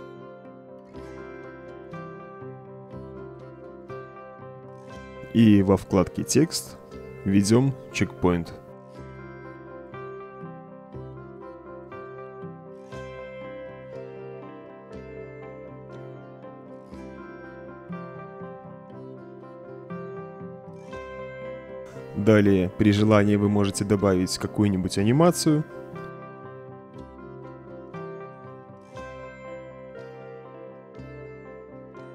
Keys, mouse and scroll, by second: 4.3 click, 7.6-10.8 typing, 11.8 Return, 14.5 middle click, 16.5-17.6 middle drag, 17.6 click, 19.2 middle click, 19.9 click, 20.3 click, 21.7-25.9 drag, 28.7 click, 29.3 click, 30.7 click.